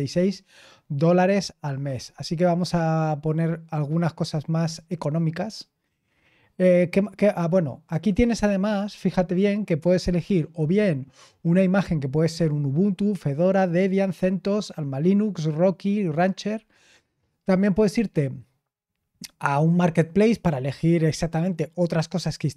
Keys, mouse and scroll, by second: 0.5-2.7 scroll down 1, 2.7-4.3 scroll down 1, 4.3-5.0 scroll down 1, 5.0-5.9 scroll down 1, 5.9 scroll down 1, 6.1-8.0 scroll up 1, 8.0-13.3 scroll down 1, 13.3-14.7 scroll down 1, 14.7-15.7 scroll down 1, 15.7-16.7 scroll down 1, 16.7-17.1 scroll down 1, 17.1 click, 18.7-22.0 scroll down 3.